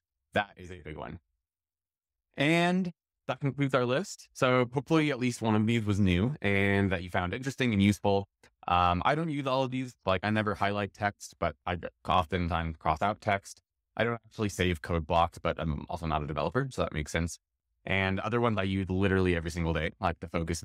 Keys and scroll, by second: 2.7 shift+super+x.